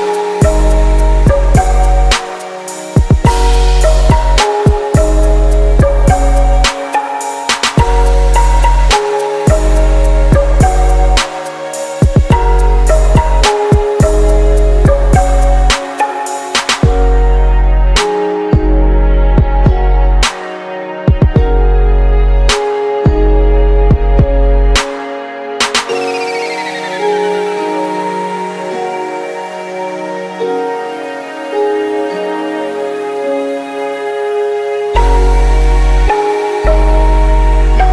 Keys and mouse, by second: 4.0-6.4 middle drag, 6.5 shift+s, 8.5 shift+a, 11.8-13.7 drag, 13.1-15.3 middle drag, 16.6 Tab, 19.3 e, 21.8 ctrl+z, 23.4 g, 24.9 e, 26.9 alt+m, 30.4-32.3 drag, 30.8 a, 31.0 a, 31.5 s, 34.3 Tab, 37.5-37.9 drag.